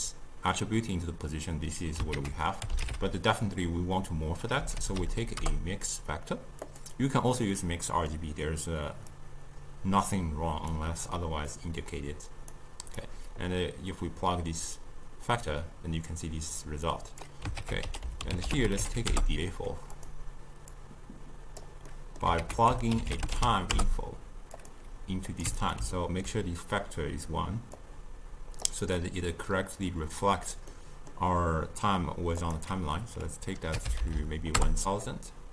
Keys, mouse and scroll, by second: 2.2 ctrl+a, 8.2-9.2 middle drag, 9.2-11.6 drag, 13.0-16.0 drag, 17.6 ctrl+a, 20.8-21.9 drag, 21.9 middle click, 22.5 ctrl+a, 25.3 click, 26.0-27.8 ctrl+middle drag, 27.8-30.8 drag, 30.8-32.4 middle drag, 32.4-34.0 drag, 34.0 0, 34.2 0.